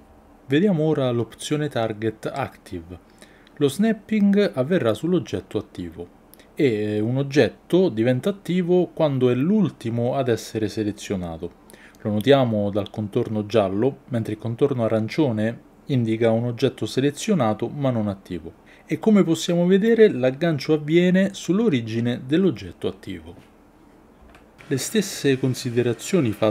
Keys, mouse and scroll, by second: 1.6-5.8 drag, 11.1 click, 19.2 g, 25.2-26.5 drag.